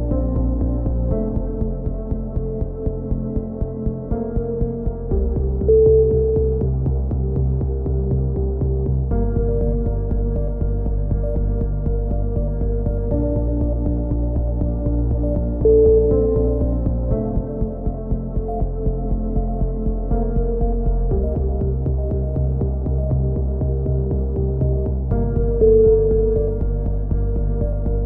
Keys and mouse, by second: 0.2 KP_3, 0.9-2.0 drag, 2.6 s, 4.4 c, 4.9-6.4 drag, 10.1 c, 10.6 right click, 11.1 middle click, 11.6 click, 12.1 a, 12.2 b, 12.9 e, 13.9 click, 15.6-18.4 drag, 18.4 s, 20.3 click, 20.4 c, 21.4-22.5 drag, 22.9 c, 23.8 click, 25.6 a, 25.9 z, 26.2 click, 27.1 KP_7, 27.4 z, 27.9 b.